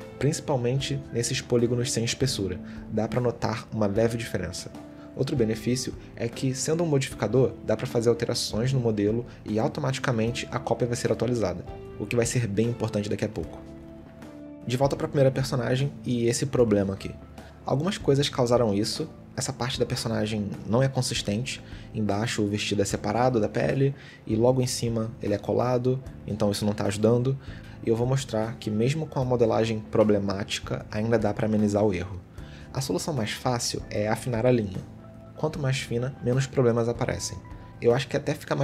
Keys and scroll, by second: 14.0 a, 16.6 Tab, 16.8 a, 22.6 g, 25.3 g, 27.6 g, 30.7 g.